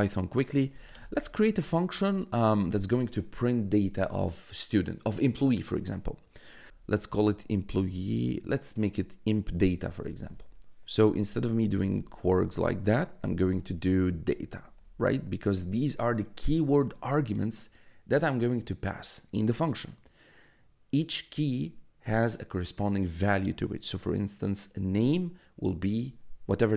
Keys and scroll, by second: 0.4 d, 0.9 space, 6.5-8.0 typing, 9.3-15.2 typing.